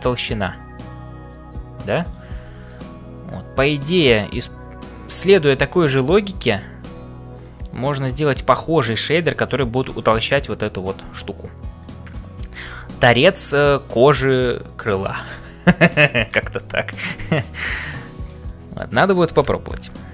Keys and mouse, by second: 0.0-6.8 typing, 2.6-6.5 right drag, 7.4-9.0 middle drag, 11.8 middle click, 11.8 c, 16.5 middle click, 18.1 shift+middle click, 18.5 middle click, 19.9 ctrl+s.